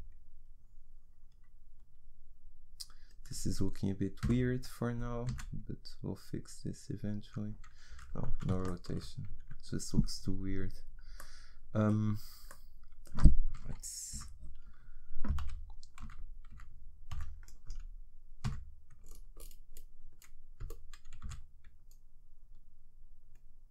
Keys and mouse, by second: 4.2 r, 13.6 KP_1, 14.1 KP_3, 15.4 a, 16.0 z, 16.5 z, 17.2 b, 18.5 g.